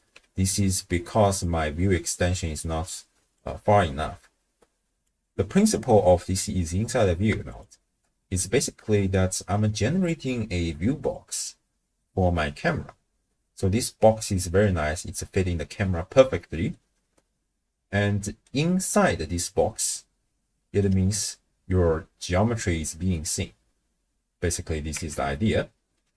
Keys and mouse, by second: 1.4-3.4 drag, 5.0 click, 5.6 click, 7.5 alt+shift+click, 8.7-9.2 middle drag, 11.1 click, 12.0-15.0 middle drag, 16.9-18.5 middle drag, 19.0-20.9 middle drag, 24.9 KP_0.